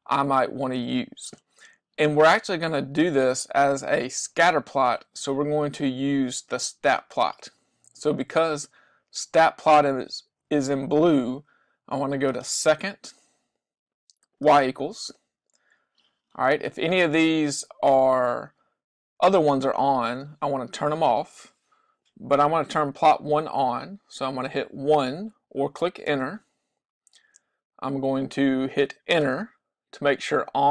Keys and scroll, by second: 26.2 Return, 29.3 Return.